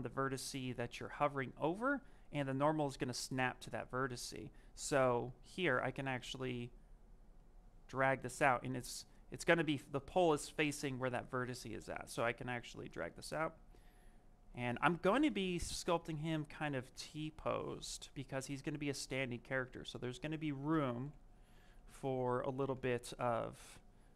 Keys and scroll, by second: 5.7 z, 20.6 b.